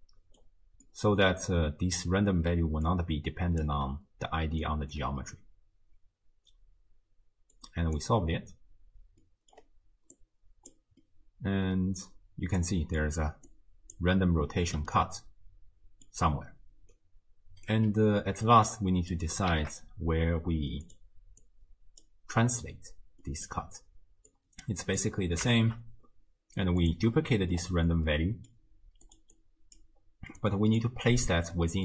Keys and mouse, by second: 0.0-0.4 drag, 0.9-1.4 middle drag, 2.5 d, 2.9 click, 3.7 d, 4.2 d, 4.6 click, 5.0 d, 7.6 click, 9.2-9.6 middle drag, 10.2-10.7 drag, 11.1-13.1 middle drag, 13.1-14.6 d, 13.5 click, 15.1-16.1 middle drag, 15.1 d, 16.2-16.9 d, 16.9 click, 17.7 d, 18.4-18.7 middle drag, 18.4 d, 19.1 click, 19.5 shift+d, 21.4-22.0 drag, 23.3 middle click, 24.3-25.0 drag, 25.6 ctrl+shift+d, 27.2-27.5 middle drag, 28.1-28.5 middle drag, 29.1 click, 29.4-29.9 drag, 30.4-30.9 drag, 31.6-31.8 middle drag.